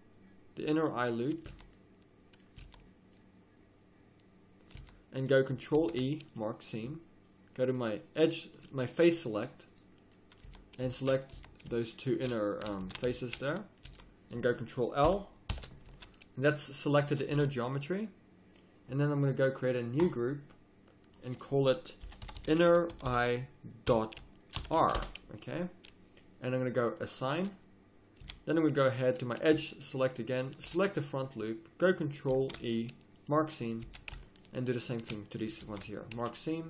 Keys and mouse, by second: 1.5 z, 2.6 z, 4.7 z, 5.7 ctrl+e, 7.7-9.8 drag, 10.5 z, 11.3 z, 12.8 ctrl+z, 13.9 z, 14.4 middle click, 15.0 ctrl+;, 15.5 ctrl+l, 15.9 z, 17.3 z, 20.0 click, 20.8-22.4 drag, 22.4 n, 27.0-30.7 drag, 28.2 a, 29.9 right click, 30.7 middle click, 31.4 click, 32.3 ctrl+e, 33.8 a, 34.3-35.7 drag, 35.6 ctrl+e.